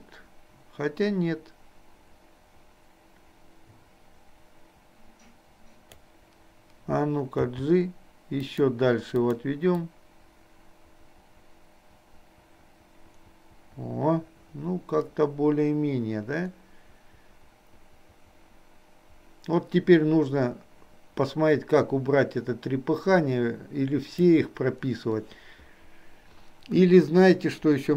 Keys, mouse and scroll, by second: 7.4 g, 9.3 click, 10.0-24.4 drag.